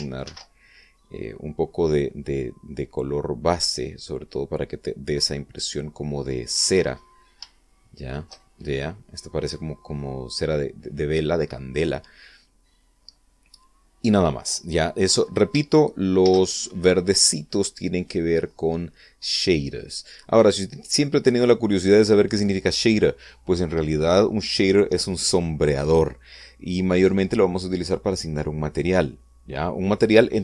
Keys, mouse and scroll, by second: 0.9 ctrl+v, 4.4-6.5 drag, 7.7 scroll up 2, 7.9 shift+middle click, 8.2 shift+click, 13.5 scroll down 2, 14.7 scroll down 2, 16.9 shift+z.